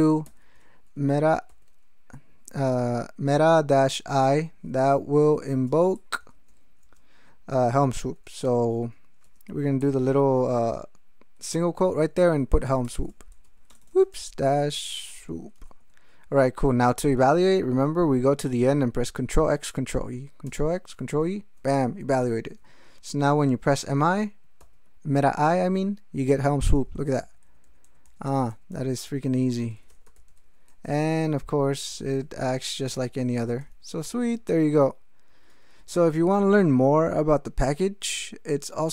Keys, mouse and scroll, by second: 0.2 shift+m, 1.2 -, 1.5 i, 4.2-6.8 typing, 8.0 ', 9.2 BackSpace, 9.8 ', 12.4-16.1 typing, 20.4 ctrl+x, 21.1 ctrl+e, 24.6 alt+i, 26.7 ctrl+n, 29.5-32.6 typing, 33.6 ctrl+g, 35.3 ctrl+e, 38.5 ctrl+alt+Up.